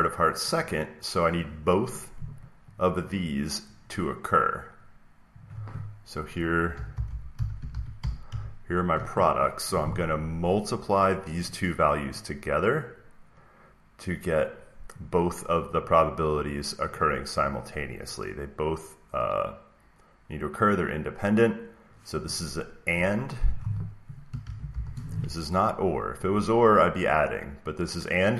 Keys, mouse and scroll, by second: 1.4 click, 2.7 click, 5.4 click, 6.4-8.7 typing, 6.8 click, 8.9 Return, 10.4 click, 11.4 click, 12.1 click, 14.9 click, 15.8 click, 16.4 click, 16.9 click, 17.4 click, 23.5 click, 24.1-25.1 typing.